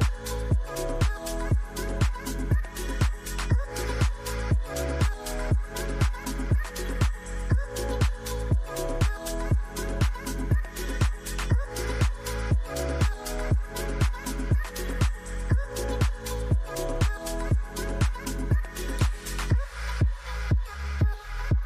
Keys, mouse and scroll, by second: 0.9 shift+click, 1.6 typing, 3.3 shift+click, 4.1 c, 13.5 shift+click, 14.2 c, 16.8 shift+click, 17.3 c, 19.2 shift+click, 19.9 c.